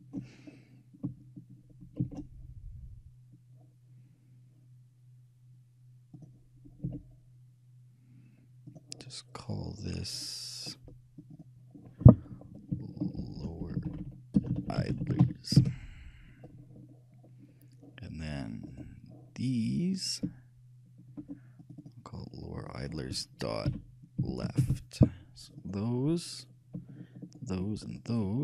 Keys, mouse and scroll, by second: 2.2 shift+a, 7.0 s, 10.4-11.6 middle drag, 11.4-13.5 drag, 18.0-19.4 middle drag, 18.9-20.7 right drag, 21.7-23.8 shift+drag, 25.8-27.7 drag, 27.7-28.4 shift+right drag.